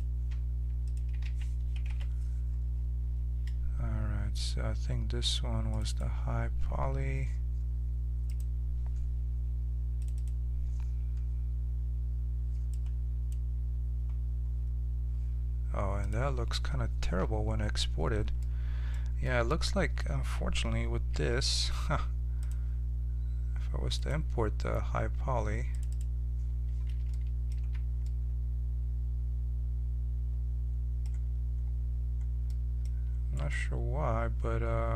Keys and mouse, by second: 18.4-21.5 middle drag, 21.1 5, 26.0-27.9 drag, 27.5 z, 27.9 middle click, 28.2 right click, 28.4-30.2 middle drag, 31.2-33.3 middle drag, 33.3-34.9 right drag.